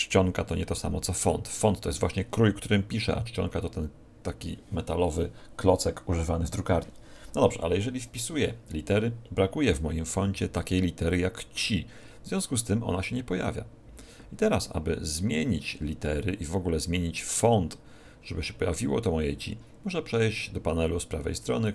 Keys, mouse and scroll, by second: 21.6 click.